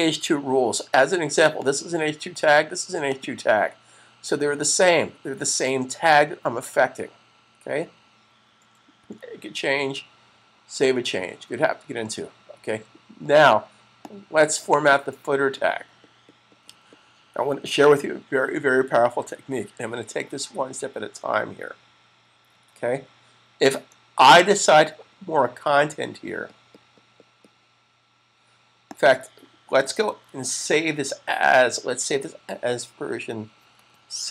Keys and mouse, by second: 1.3 click, 8.7 super+s, 13.8 click, 28.8 click, 29.9 super+s, 31.2 shift+super+s, 32.8 Right.